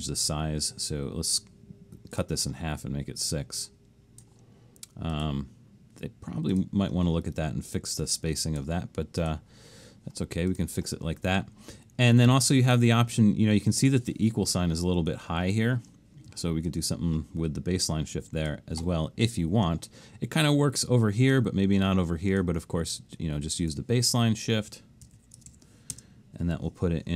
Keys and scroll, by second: 25.5 typing.